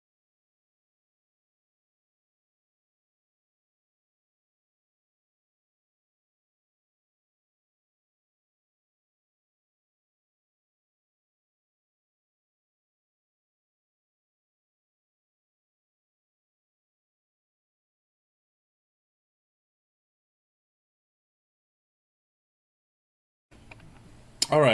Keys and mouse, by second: 0.6 ctrl+z, 1.3 ctrl+z, 1.4 f, 3.6 click, 4.0 click, 6.3 Tab, 7.3 w, 9.1 Tab, 16.2-16.6 middle drag, 17.9 middle click, 19.1 click, 22.2 click, 22.4-22.8 middle drag, 23.1 middle click, 24.2-24.7 middle drag.